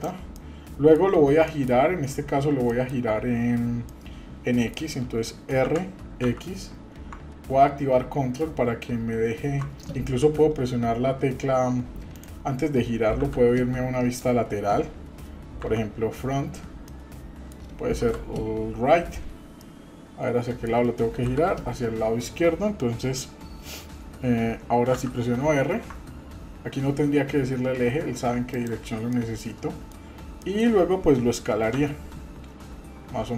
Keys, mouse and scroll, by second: 0.3 middle click, 1.5 shift+middle click, 2.7 middle click, 3.9-4.8 middle drag, 5.6 r, 13.1 KP_3, 15.6 KP_1, 16.1-16.5 scroll down 1, 16.9 middle click, 18.0 KP_3, 19.6-20.7 middle drag, 21.2 KP_3, 24.9 r, 29.1 middle click, 30.1-30.4 scroll up 2, 30.4 shift+middle click, 31.7 s.